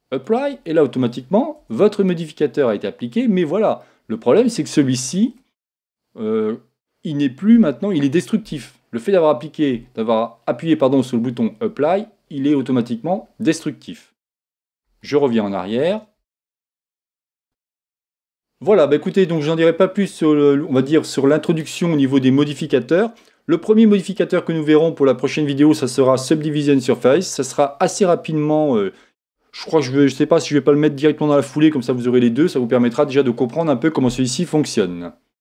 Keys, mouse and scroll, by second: 1.6 Tab, 2.1-4.0 middle drag, 14.8 ctrl+z, 15.7 ctrl+z, 16.2 ctrl+z, 17.0 ctrl+z, 17.7-22.9 ctrl+shift+middle drag.